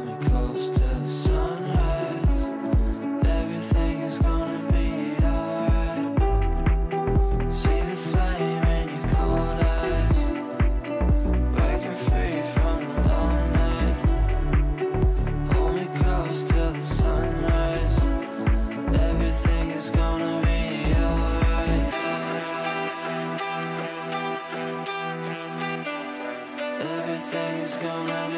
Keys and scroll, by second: 12.0 F3, 12.5 Escape, 18.6 shift+Page_Down, 28.2 space.